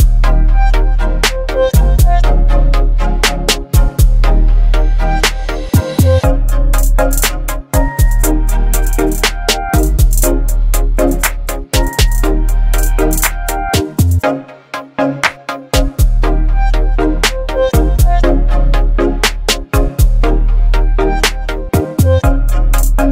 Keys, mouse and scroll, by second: 6.4-7.2 typing, 7.2 Return, 9.1 click, 10.7 alt+scroll up 1, 11.2-11.8 click, 11.6 space, 13.6 ctrl+t, 15.4-17.9 drag, 22.5-23.1 shift+drag.